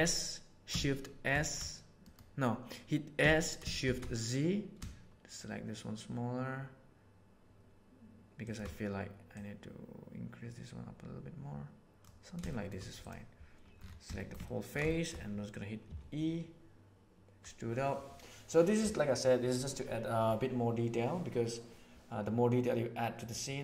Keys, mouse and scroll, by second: 3.1 s, 9.3 click, 10.1-12.0 middle drag, 12.4 shift+middle click, 14.1 shift+middle click, 14.5 ctrl+middle click, 14.8 shift+middle click, 15.9 e.